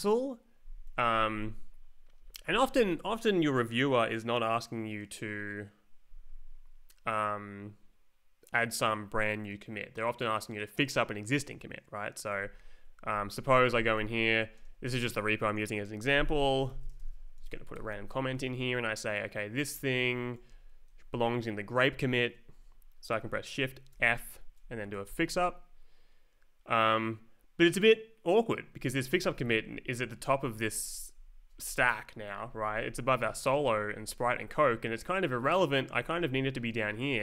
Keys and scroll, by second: 13.1 ctrl+s, 13.8 space, 14.0 /, 14.5 space, 16.2-17.7 typing, 17.8 ctrl+t, 18.3 Left, 19.7 space, 20.4 Right, 23.9 shift+f, 25.0 Return, 28.7 Up, 30.2 Down, 30.7 Up, 32.4 Down, 33.0 Up, 33.4 Down, 34.0 Up, 34.4 Down, 35.1 Up, 35.9 Down, 36.8 Up.